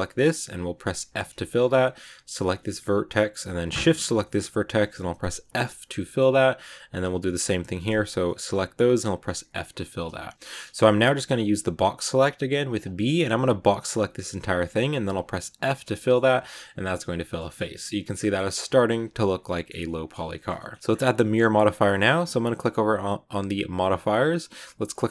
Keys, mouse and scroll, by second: 0.9 f, 1.3 shift+scroll up 1, 2.2 right click, 2.5 middle click, 2.7-3.7 scroll up 2, 3.7 shift+right click, 4.1-5.4 shift+middle drag, 5.4 f, 5.8 shift+middle click, 6.8 right click, 7.8 shift+right click, 8.0 scroll down 1, 8.1-9.2 middle drag, 9.2 f, 12.1 b, 14.3 middle click, 14.7-15.4 scroll down 2, 15.4 f, 15.9 shift+middle click, 16.2 Tab, 16.4 scroll down 1, 16.5 middle click, 17.3 Tab, 17.5 middle click, 17.9 a, 18.0 middle click, 18.8 Tab, 19.3 middle click, 20.0 scroll down 1, 20.2-23.6 shift+middle drag, 23.6 click.